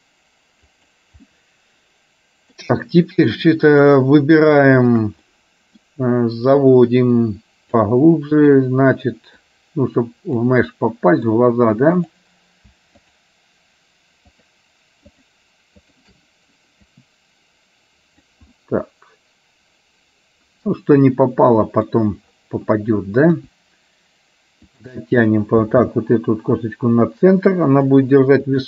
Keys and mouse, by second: 1.4-2.7 middle drag, 4.9 shift+click, 5.4 middle click, 6.8-7.9 drag, 8.4 click, 9.4-10.4 drag, 10.9 middle click, 13.0 shift+click, 14.5 shift+click, 15.9 shift+click, 17.2-18.3 drag, 18.8-21.9 middle drag, 23.4 KP_1, 25.9 g.